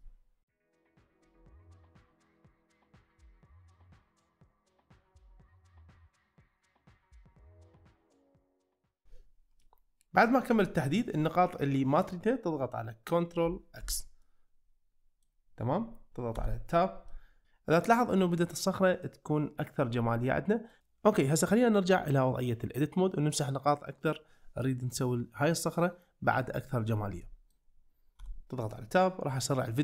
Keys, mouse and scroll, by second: 0.0 middle click, 0.6 middle click, 0.9 c, 1.7 middle click, 2.0 middle click, 2.3 c, 2.7 middle click, 3.0 c, 3.8 middle click, 4.5 c, 4.9 right click, 5.1 middle click, 5.5 c, 6.1 middle click, 6.6 middle click, 6.9 middle click, 7.3 middle click, 7.8-8.1 middle drag, 8.9 shift+click, 9.6-11.0 middle drag, 13.8 ctrl+x, 14.2-15.2 middle drag, 16.4 Tab, 17.1 middle drag, 20.3-20.7 middle drag, 27.2 middle drag, 28.2 Tab, 28.8-29.4 middle drag.